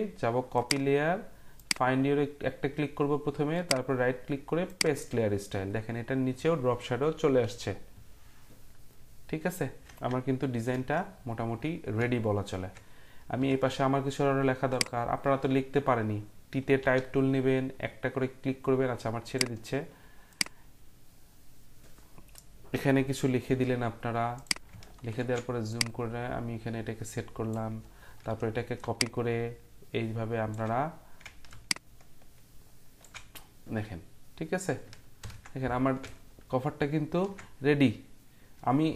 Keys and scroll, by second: 7.1 Up, 7.5 typing, 10.6 ctrl+0, 16.8 t, 35.2 ctrl+0.